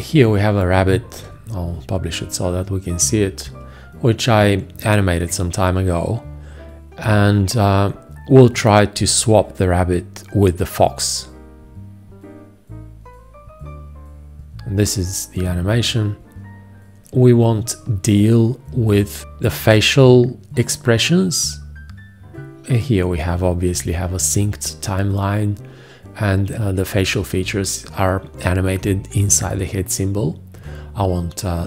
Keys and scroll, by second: 1.4 ctrl+Return.